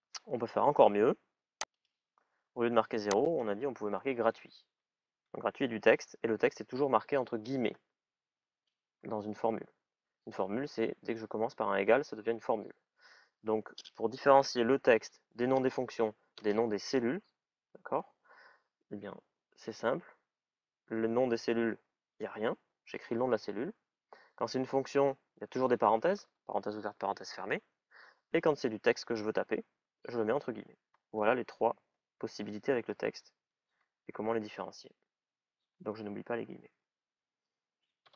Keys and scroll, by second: 5.1 BackSpace, 30.8-33.3 typing, 37.8 Return.